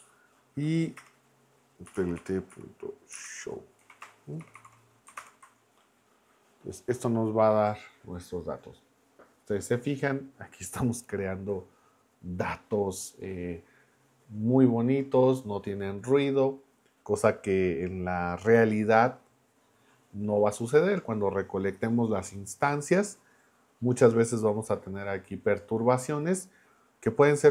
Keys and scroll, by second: 0.0 Right, 1.0 Return, 1.6-5.0 typing, 5.2 ctrl+Return.